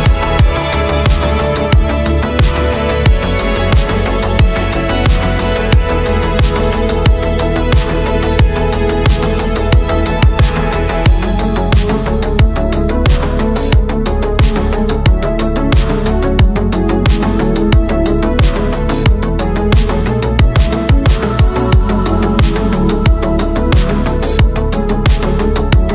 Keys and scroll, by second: 2.3 space, 4.8 ctrl+z, 5.3 space, 9.7 space, 11.5 space, 12.8 space, 13.5 space, 16.7 space, 20.9 space, 23.0 space, 23.3 space.